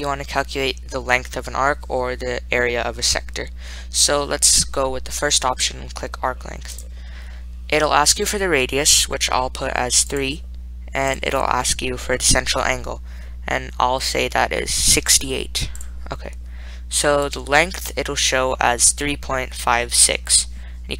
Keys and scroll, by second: 7.0 Return, 10.5 3, 11.4 Return, 15.5 6, 16.0 8, 17.6 Return.